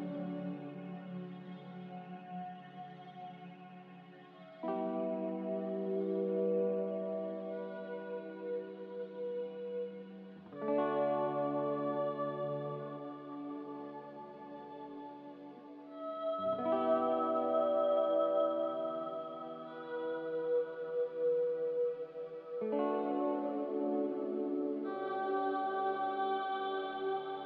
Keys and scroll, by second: 8.2 a, 14.1 ctrl+c, 17.0-17.7 typing, 27.4 Escape.